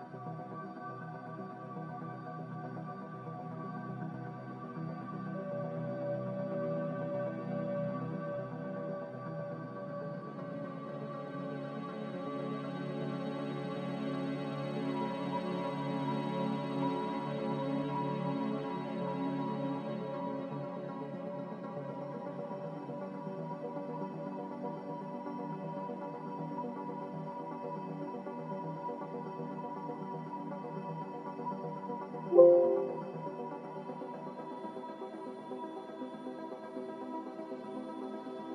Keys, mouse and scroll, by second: 0.1 typing, 0.3 Return, 3.9-7.2 typing, 12.0-13.1 typing, 13.4 Return, 16.1-16.9 typing, 21.4 b, 26.7 ctrl+z, 27.0 ctrl+z, 32.4 Escape, 36.4 z.